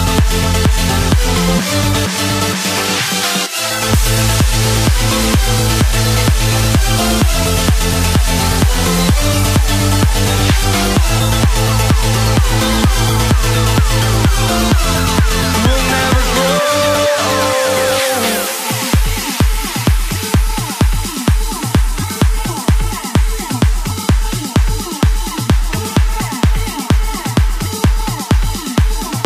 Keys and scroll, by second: 11.7 ctrl+z, 28.6 ctrl+t.